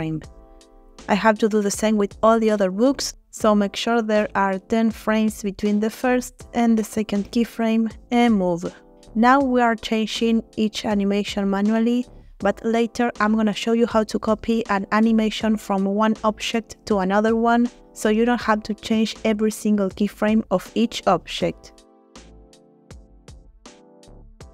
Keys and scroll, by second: 7.1 g, 13.2 g, 17.9 g, 22.7 g.